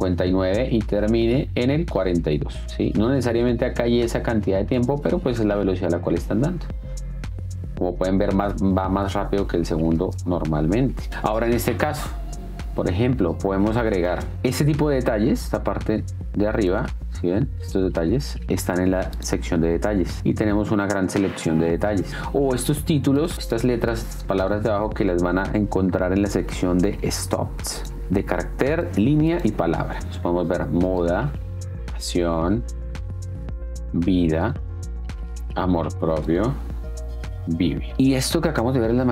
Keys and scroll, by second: 5.0 space, 10.1 space, 11.0 Down, 14.4 d, 30.0 space.